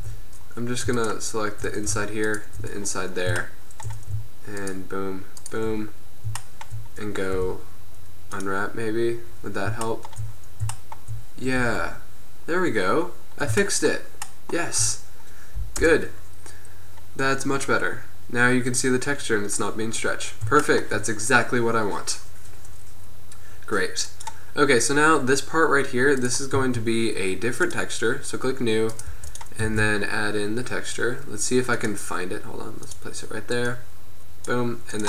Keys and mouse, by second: 0.1 Tab, 2.9 middle click, 3.5-6.2 middle drag, 7.4 u, 9.2 middle click, 9.6 middle click, 11.8 Tab, 15.9 KP_0, 19.7 middle click, 20.9-21.3 middle drag, 25.4-26.4 middle drag, 27.8 click, 29.4 g, 29.8 shift+a.